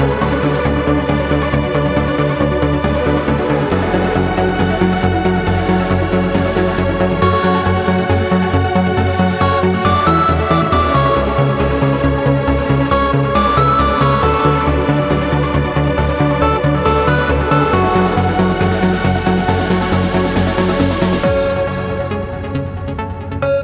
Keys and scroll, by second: 5.2 super+=, 6.2 super+=, 6.3 super+space, 10.4 space, 12.1 space, 14.8 space.